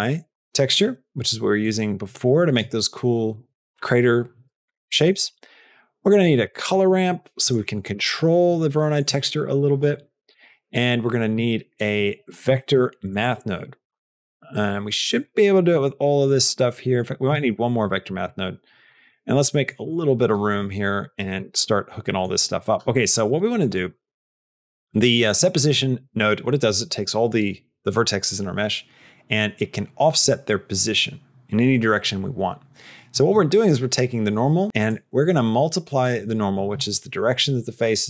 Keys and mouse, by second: 2.2 click, 9.3 click, 9.7 click, 10.1 click, 15.4 middle click, 16.1 click, 18.0 middle click, 19.2 middle click, 20.3 click, 21.0 click, 21.3 middle click, 22.0 middle click, 22.4 click, 23.1 click, 23.4 click, 23.9 middle click, 24.7 click, 34.8-36.0 drag.